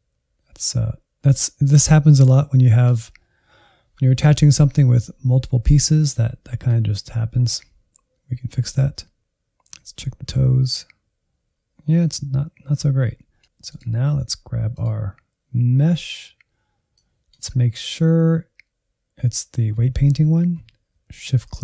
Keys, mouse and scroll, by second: 13.0 Left, 13.6-17.5 drag, 17.5 KP_Decimal, 21.0-21.6 shift+drag.